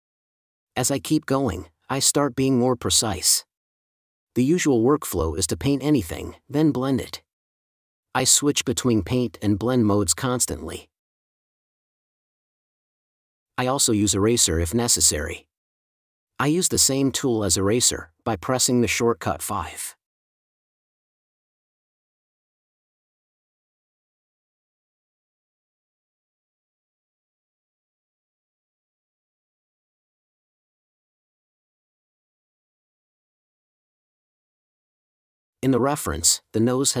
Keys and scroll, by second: 7.2 space, 8.1 4, 31.8 space.